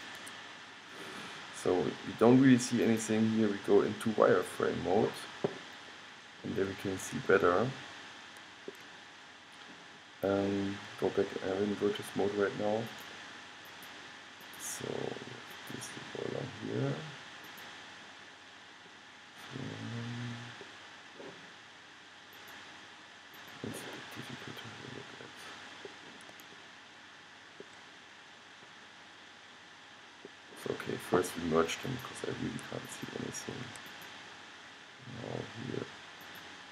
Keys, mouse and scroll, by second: 3.1 click, 5.0-6.0 middle drag, 6.0-7.5 scroll up 1, 7.5 scroll up 1, 7.6-11.1 middle drag, 13.0-19.0 drag, 19.0-20.7 middle drag, 22.5 click, 23.4 click, 23.7 click, 24.6-26.4 middle drag, 26.7-30.5 middle drag, 32.0-35.9 drag, 35.9 middle click.